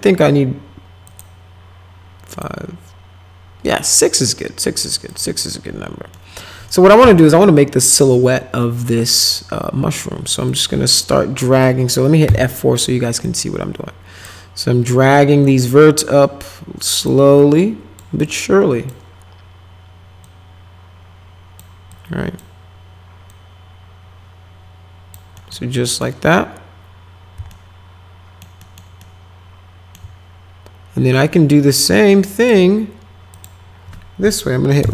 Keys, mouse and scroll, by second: 1.0 click, 2.3 click, 5.1 click, 6.1 middle click, 7.0 1, 8.0-9.3 drag, 10.5 click, 11.6 middle click, 12.2 F4, 13.2 click, 15.4-17.1 drag, 17.4 click, 18.3 click, 20.2-21.6 drag, 21.9 click, 23.3-25.1 drag, 25.4 middle click, 25.8 middle click, 27.5 alt+middle click, 28.6 alt+middle click, 29.0 alt+middle click, 32.4 click, 33.3 click, 34.8 Right.